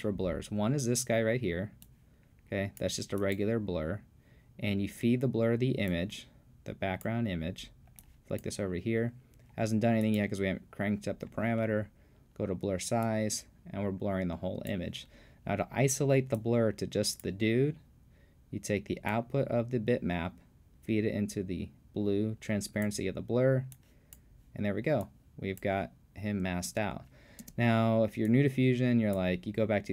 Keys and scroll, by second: 26.7 space.